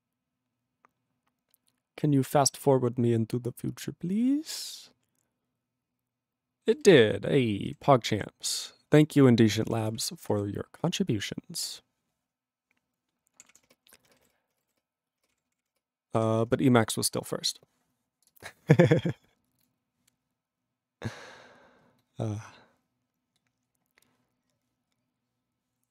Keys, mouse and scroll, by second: 16.2 q.